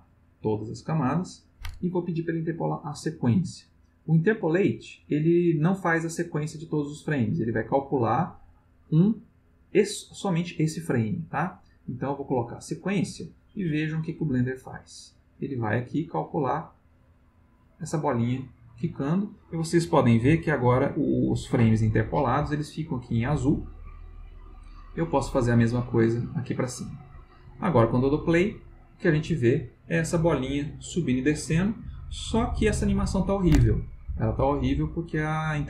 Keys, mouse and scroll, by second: 0.1 click, 11.5 click, 12.6 click, 14.7-19.2 drag, 23.5-24.4 drag, 25.1 click, 26.1 click, 28.0 click.